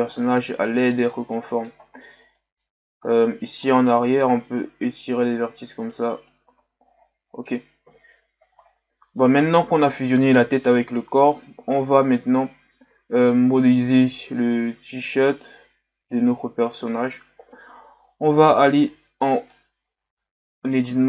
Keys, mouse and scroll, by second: 0.1-0.6 scroll down 7, 0.6-1.7 middle drag, 1.7-2.1 scroll up 3, 2.1 Tab, 2.3 middle click, 2.7-3.1 scroll up 3, 3.1-3.7 middle drag, 3.7 right click, 3.9-4.6 middle drag, 4.6-6.7 drag, 6.7 Tab, 7.0-7.7 scroll down 4, 7.8 KP_1, 8.7-9.0 scroll down 1, 11.7-13.0 scroll down 6, 14.1 scroll up 1, 16.8 scroll up 4, 18.5 z, 18.9 z, 19.4 right click, 20.1 Tab, 20.9 z.